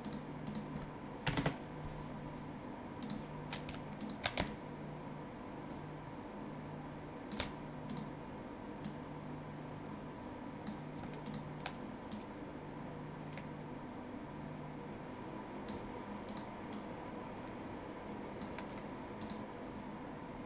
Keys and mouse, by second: 1.3 KP_1, 1.4 Return, 3.0 click, 4.0 shift+click, 4.5 ctrl+click, 5.7 ctrl+shift+click, 7.9 click, 11.3 shift+click, 16.3 click, 19.2 click.